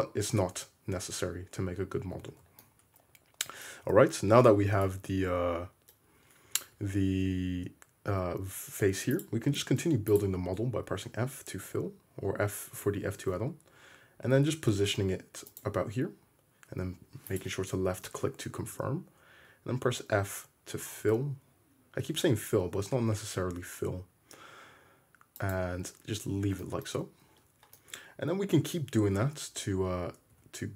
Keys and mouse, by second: 1.3 `, 2.3 alt+z, 2.4 click, 2.9-9.2 middle drag, 3.8 `, 6.8 `, 9.5 shift+middle click, 10.2 click, 10.9-17.4 middle drag, 10.9 f, 17.4 click, 17.4-19.9 middle drag, 18.6 f, 19.9-22.1 drag, 22.1 middle click, 23.8-30.4 shift+middle drag, 29.2 `, 30.3 `.